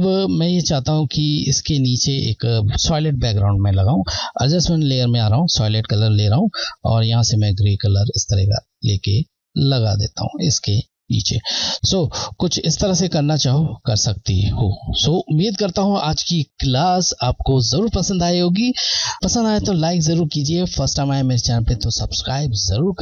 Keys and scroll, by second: 0.7 Left, 4.7 Left, 13.9-16.0 scroll.